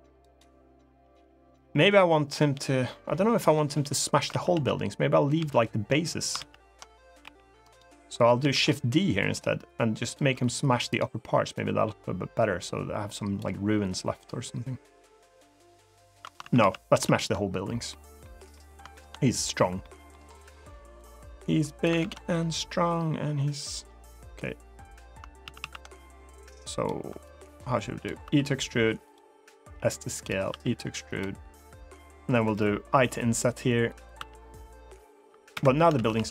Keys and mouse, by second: 4.1 ctrl+z, 4.3 ctrl+z, 5.1 ctrl+z, 6.5 ctrl+z, 7.0 g, 7.3 right click, 8.2 shift+d, 9.0 s, 9.8 click, 10.0 e, 10.6 right click, 11.3-13.1 drag, 16.2 ctrl+z, 16.3 ctrl+z, 16.7 ctrl+z, 17.6 middle click, 18.3 middle click, 18.6 shift+middle click, 19.5 middle click, 20.7 click, 21.8 ctrl+z, 25.2 ctrl+z, 25.3 ctrl+z, 26.2 click, 27.0 click, 28.0 e, 28.8 click, 29.3 s, 29.9 click, 30.2 e, 30.8 click, 32.7 i, 33.8 click, 33.9 e, 35.3 Escape, 35.7 ctrl+z, 35.9 ctrl+z, 36.1 ctrl+z, 36.2 ctrl+z.